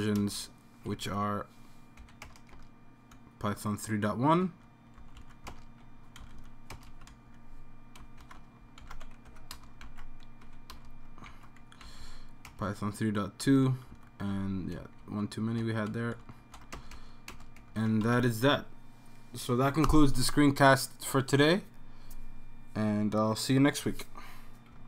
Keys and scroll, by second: 0.2 Return, 2.0 super+v, 2.2 Home, 2.2 BackSpace, 2.5 BackSpace, 3.1-4.0 Right, 4.0 Right, 4.5 Right, 5.0 Left, 6.2 Right, 6.7 typing, 7.1 Right, 7.2 Right, 8.4 shift+Home, 9.3 super+c, 9.3 End, 9.5 Return, 9.8 super+v, 10.4 End, 10.7 Return, 11.3 super+v, 12.0 Left, 12.5 BackSpace, 12.6 2, 13.7 Right, 15.0 shift+super+Home, 16.2 shift+super+Left, 16.7 BackSpace, 17.3 BackSpace, 18.0 super+s.